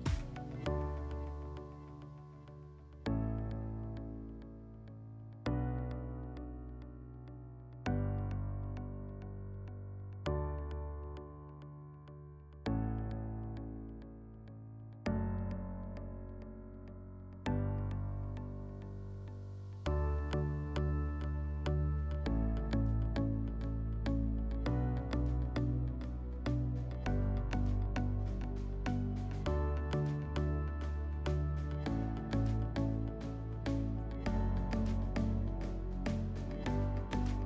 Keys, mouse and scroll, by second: 2.6-3.2 drag, 10.4-11.9 drag, 11.3 w, 14.4-15.9 drag, 17.4 click, 26.1-27.7 drag, 28.4 /, 35.1 /.